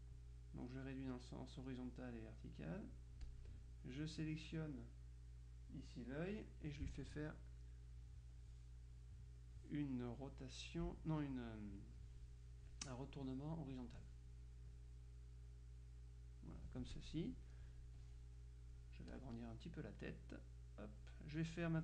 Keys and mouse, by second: 0.9-2.2 drag, 4.2-7.2 drag, 13.8 click, 14.8-17.6 drag, 18.0-20.0 drag, 20.2-21.6 drag.